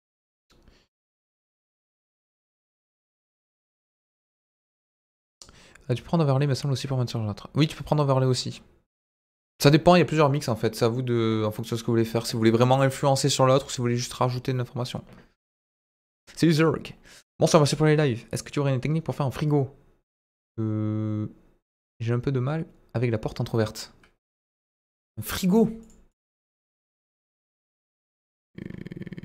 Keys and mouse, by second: 26.0 click, 26.7 Delete, 27.1 KP_1, 27.5 shift+a.